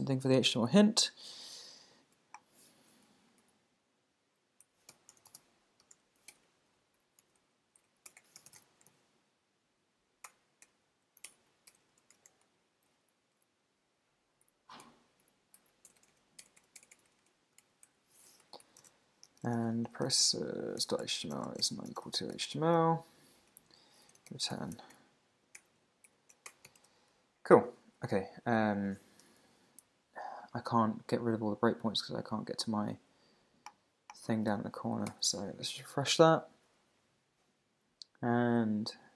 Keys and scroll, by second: 3.1 Down, 3.4 alt+Right, 4.1 alt+Right, 4.6 Left, 7.1 shift+super+Right, 7.2 super+x, 7.4 Down, 8.1 Return, 8.9 super+v, 10.3 Return, 12.6 Up, 13.1 alt+Right, 13.9 alt+Right, 14.8 alt+Left, 15.6 alt+Right, 17.6 super+Right, 17.9 Left, 20.3 Tab, 22.7 shift+1, 23.2 Right, 23.5 Down, 23.7 Tab, 24.9 Return, 25.6 super+BackSpace, 26.1 Down, 26.5 Return, 26.7 super+s, 26.8 super+Tab, 34.5 super+w, 35.1 super+r.